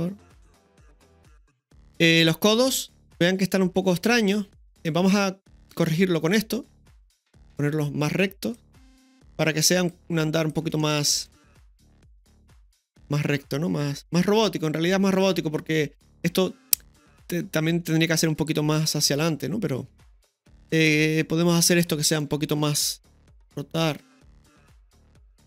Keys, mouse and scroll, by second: 2.8-4.4 middle drag, 4.6-4.9 middle drag, 5.3-6.1 typing, 5.6 right click, 6.5-9.1 drag, 9.1 right click, 9.9 click, 10.3-11.1 typing, 10.8-11.8 middle drag, 11.8-15.2 drag, 17.9-20.4 middle drag, 20.7-21.6 middle drag, 22.0 middle drag, 23.4 r, 25.3-25.4 drag.